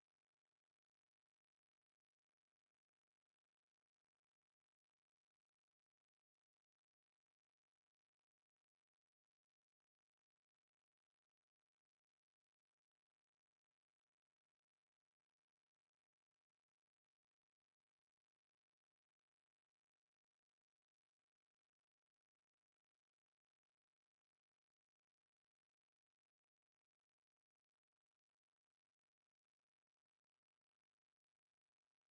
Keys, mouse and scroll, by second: 3.0-5.0 middle drag, 3.5 Tab, 4.6 r, 8.1-11.5 middle drag, 12.5-16.0 drag, 16.7-20.5 drag, 19.4-21.3 middle drag, 20.9 Tab, 22.3 right click, 24.4 click, 26.7 right click, 28.5 middle click, 29.3 e.